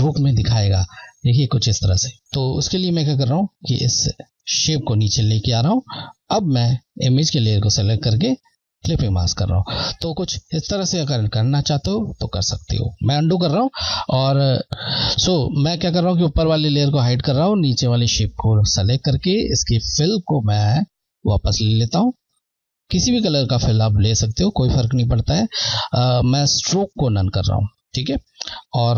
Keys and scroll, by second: 2.2 z, 3.9 Left, 9.0 Left, 13.8 z, 16.4 Left, 21.0 Left.